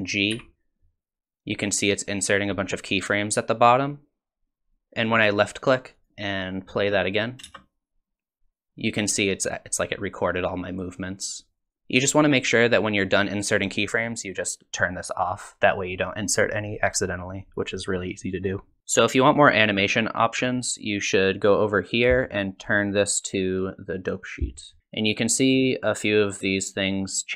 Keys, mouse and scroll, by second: 0.3 g, 6.1 space, 7.2 click, 7.4 space, 15.1 click, 22.0 click, 24.4 click.